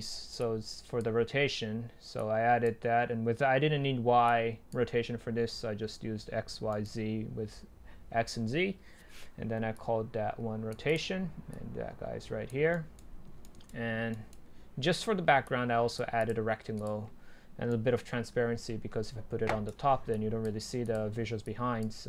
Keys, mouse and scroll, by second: 6.8-7.8 right drag, 7.8-8.8 scroll up 2, 8.8-9.8 scroll up 1, 9.8 click, 12.3 click, 12.7-13.2 right drag, 13.2 scroll down 1, 13.5 right click, 19.7-21.7 middle drag.